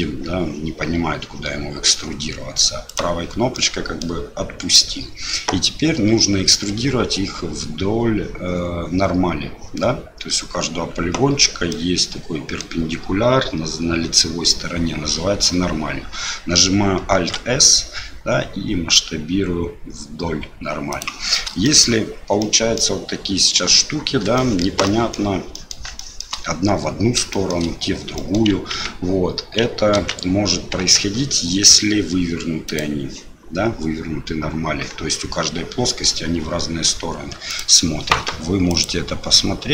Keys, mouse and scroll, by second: 3.7 click, 11.8 middle click, 17.1 alt+s, 21.6 shift+middle click, 22.4 middle click, 24.3 shift+middle click, 24.8 middle click, 25.5 middle click, 25.9 shift+middle click, 27.3 shift+middle click, 28.1 middle click, 28.7 ctrl+z, 29.9 ctrl+z, 30.8 Tab, 32.6-34.8 drag, 37.5-39.7 drag.